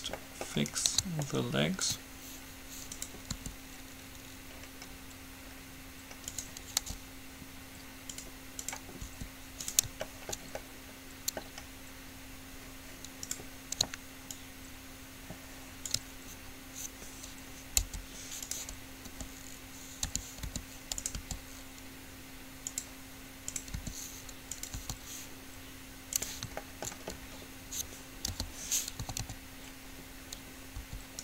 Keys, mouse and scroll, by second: 0.9-2.7 right drag, 1.4-5.1 drag, 3.5 r, 7.0 g, 8.9-10.7 drag, 9.4 r, 10.3 middle click, 10.3 right click, 13.4-15.4 right drag, 14.4-16.4 drag, 17.9 u, 19.3 t, 20.4 t, 20.6 r, 21.4 g, 23.8-25.4 drag, 23.9 r, 24.9 s, 27.1-29.4 middle drag, 28.5 p, 29.2 a, 29.4 a, 31.0 s.